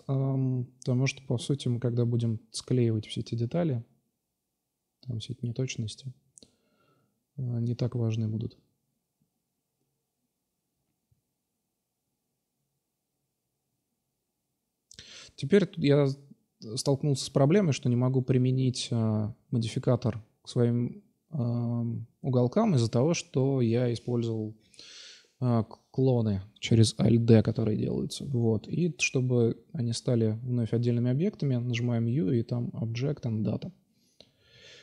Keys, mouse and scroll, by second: 0.7 s, 1.8 click, 2.7-3.7 drag, 3.2 shift+d, 5.0 click, 5.3 click, 7.0 g, 7.6-7.9 drag, 10.3 Tab, 11.1-12.2 right drag, 12.2 middle click, 12.9-13.7 drag, 14.0 middle drag, 17.9 click, 18.7 click, 20.1 ctrl+z, 20.1 alt+F5, 21.6 u, 22.6-23.5 drag, 23.0 u, 23.6 u, 24.3 u, 27.0-27.4 middle drag, 28.4 right click, 28.7-30.0 middle drag, 30.0-31.4 right drag, 31.4 ctrl+j, 33.0 click, 33.7 ctrl+z, 34.2 ctrl+z, 34.6 click.